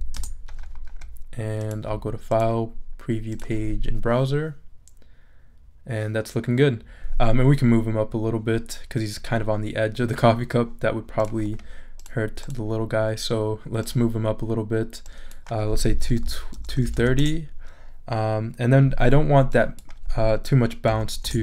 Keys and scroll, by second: 0.0-0.2 typing, 15.9-17.4 typing, 20.9 0, 21.2 Return.